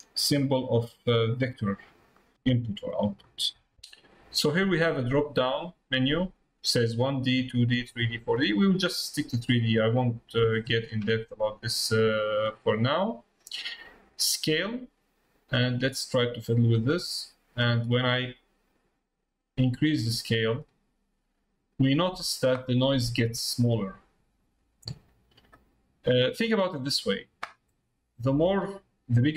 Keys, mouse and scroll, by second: 0.4 middle click, 2.2 middle click, 2.4 middle click, 3.2 middle click, 5.9-9.0 drag, 16.5-22.1 drag, 28.4-29.3 drag.